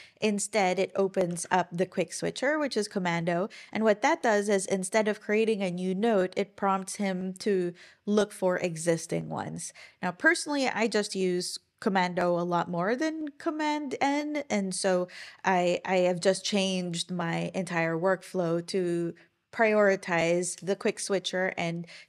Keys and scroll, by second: 1.3 super+o.